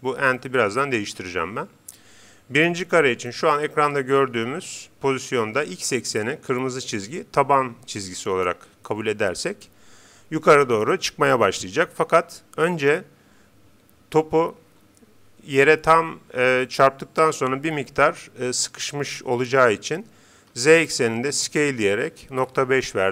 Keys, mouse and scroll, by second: 20.5 s.